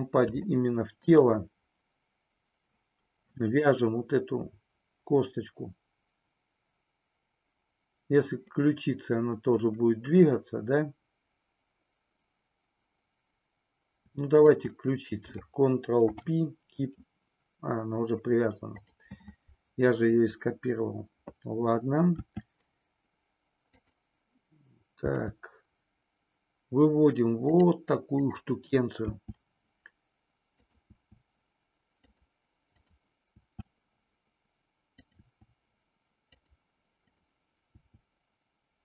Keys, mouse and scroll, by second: 0.6 middle click, 0.6 scroll up 1, 15.9 ctrl+p, 22.1 e, 27.6 click, 28.0 click, 29.1 e, 30.9 e, 32.1 click, 33.4 e, 35.0 click, 35.3 e, 37.0 click, 37.9 e.